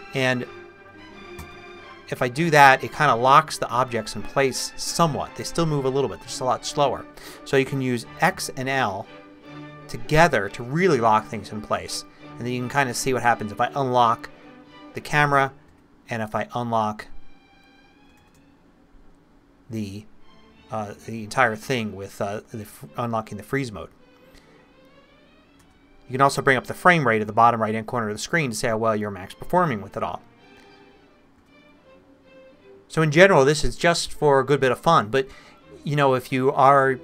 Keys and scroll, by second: 1.4 i, 8.3 x, 11.8 l, 15.7 x, 18.2 shift+/, 25.6 f, 31.4 f.